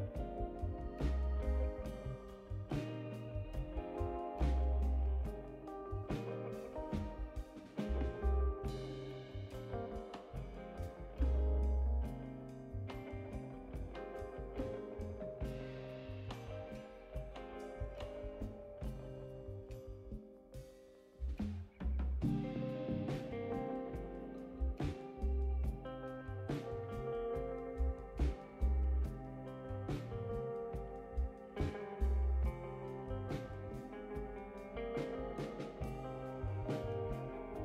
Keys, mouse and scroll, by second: 0.3 click, 3.4 click, 4.4 middle click, 4.4 scroll down 1, 7.8 click, 8.8 click, 9.6 click, 10.1 right click, 11.2 click, 14.7 click, 17.4 8, 17.9 0, 20.2 click, 21.9 click, 23.6 click, 24.7 click, 26.4 ctrl+c, 30.7 click, 31.8 click, 35.1 click, 36.8 click.